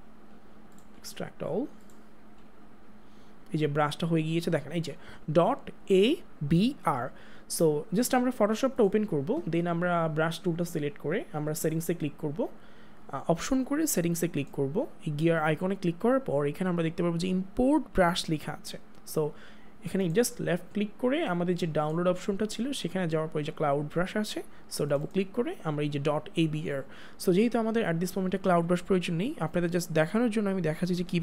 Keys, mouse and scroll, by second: 0.7 click, 8.7 click, 11.6 right click, 14.3 right click, 16.5 click, 19.9 click, 24.9 click.